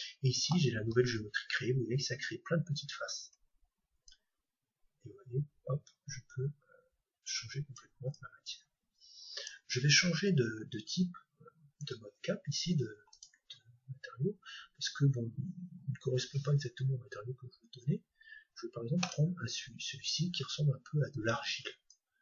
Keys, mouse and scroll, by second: 1.6-2.6 scroll up 1, 2.6 scroll up 1, 3.5 Tab, 4.1-6.0 drag, 8.2-10.1 drag, 13.1-22.2 drag.